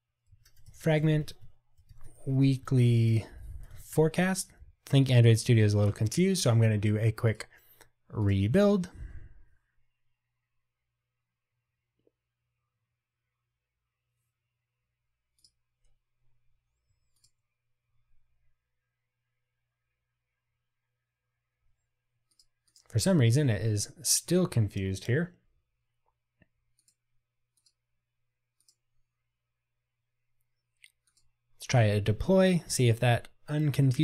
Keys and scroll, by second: 17.3 super+b, 31.3 ctrl+r.